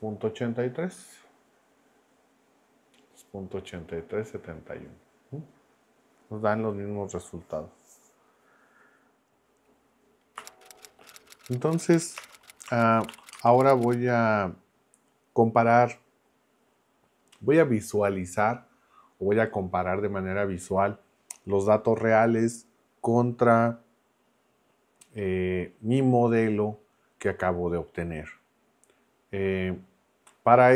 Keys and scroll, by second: 9.5 Up.